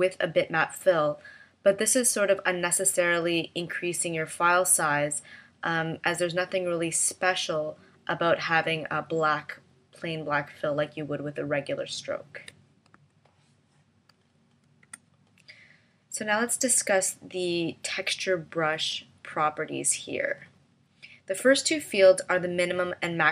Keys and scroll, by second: 12.9 v, 14.8 BackSpace.